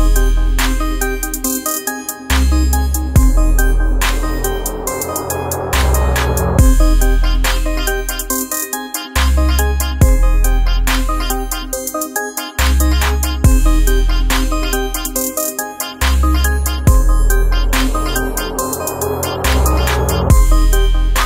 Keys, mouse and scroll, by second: 1.7 alt+scroll down 1, 2.0 space, 2.1 click, 3.0-4.7 ctrl+drag, 4.7 F7, 6.0 click, 14.7 ctrl+space, 14.9 ctrl+click, 15.3 ctrl+space, 15.9 click, 21.0 click.